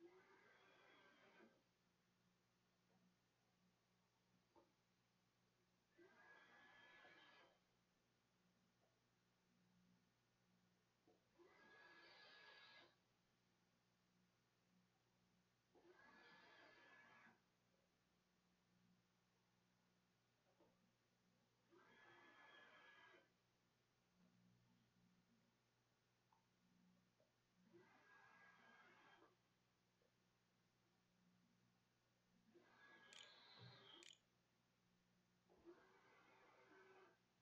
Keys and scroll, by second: 33.8 ctrl+s.